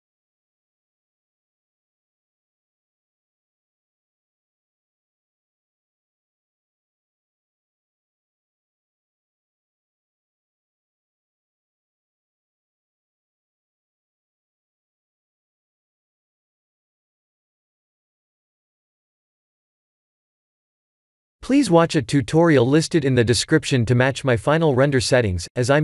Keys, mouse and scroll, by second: 1.2 click, 1.8 click, 7.3 click, 8.1 click, 23.6 click, 24.7 click.